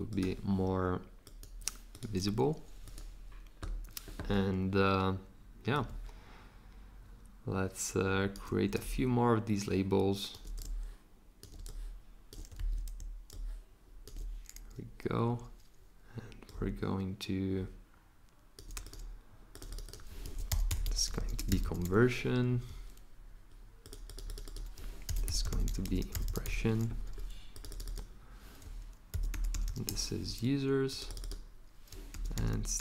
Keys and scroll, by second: 12.6 super+z, 20.0-22.4 typing, 24.8-26.9 typing, 28.9-30.3 typing, 31.9-32.8 typing.